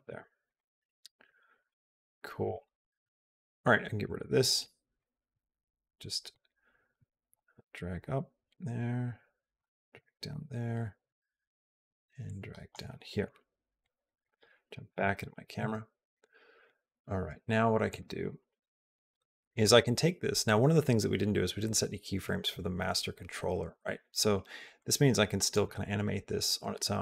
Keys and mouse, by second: 1.1 click, 1.4 click, 2.3 click, 3.9 click, 6.3 click, 9.4 click, 12.2-14.1 drag, 14.7 KP_0, 17.7 click, 24.6-26.8 drag.